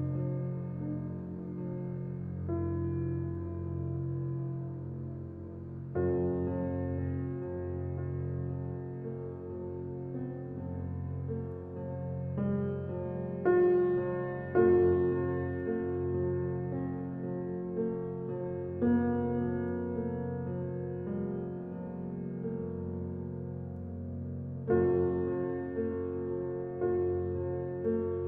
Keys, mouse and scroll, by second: 3.3-4.0 middle drag, 4.8 shift+a, 5.4 g, 7.2 alt+middle click, 8.1 g, 9.0-9.3 scroll up 1, 9.3 shift+middle drag, 9.5-9.9 scroll up 1, 9.9-10.8 shift+middle drag, 10.8 Tab, 11.8 ctrl+r, 13.8 click, 14.7 s, 17.8 click, 18.5 s, 21.4 e, 23.6 s, 25.5 click, 25.7 s, 27.7 click, 27.9 s.